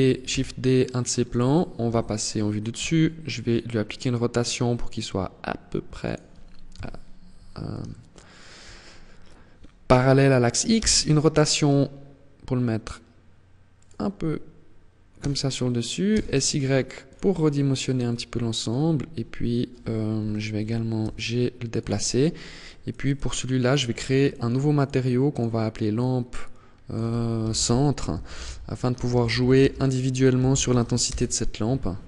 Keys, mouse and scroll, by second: 0.7 click, 1.1 KP_7, 2.0 r, 5.5 click, 5.9 KP_3, 7.1 shift+middle click, 10.0 r, 13.1 click, 14.4 s, 16.4 click, 16.9-17.3 scroll down 1, 17.3 middle click, 19.4 KP_3, 20.2 g, 21.2 click, 21.8 click, 22.3 click, 23.5 click, 24.0 click, 24.5 click, 31.7 KP_0.